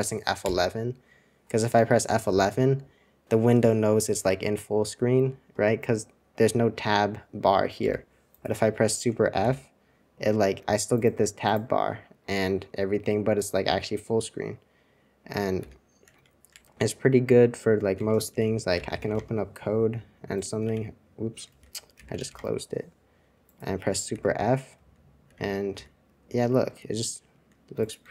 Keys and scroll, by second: 7.9 F11, 15.6 super+f, 16.1 super+1, 16.5 super+2, 17.9 super+1, 18.3 super+r, 18.4-19.5 typing, 20.6 super+c, 21.5 super+r, 21.7-22.7 typing, 26.3 super+2, 26.3 typing.